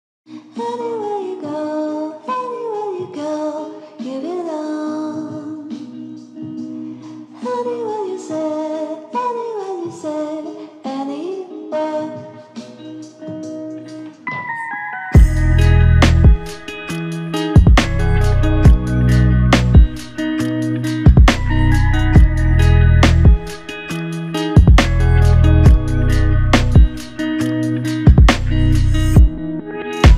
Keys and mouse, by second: 0.3 shift+click, 5.7 shift+click, 7.3 shift+click, 10.0 double click, 11.9 alt+click, 16.5 alt+click, 19.4 alt+click, 21.3 shift+click, 22.7 double click, 26.2 double click, 27.7 alt+click, 29.2 alt+click.